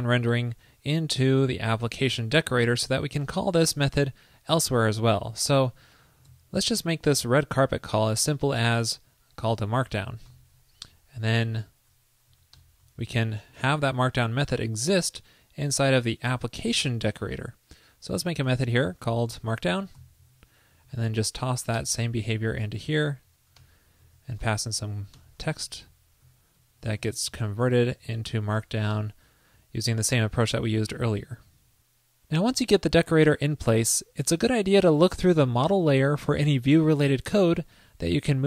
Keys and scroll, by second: 6.4 super+c, 10.8 alt+Right, 11.5 shift+super+Right, 14.0 super+s, 18.5 super+Return, 20.9 super+v, 22.2 super+Left, 22.3 alt+Right, 24.1 super+Right, 26.6 alt+shift+Right, 27.9 super+Right, 31.4 super+s.